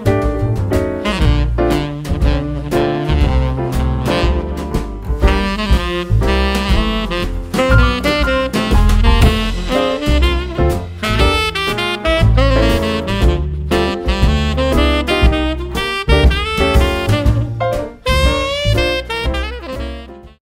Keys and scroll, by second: 1.4 ctrl+d, 2.2 super+d, 2.7 super+d.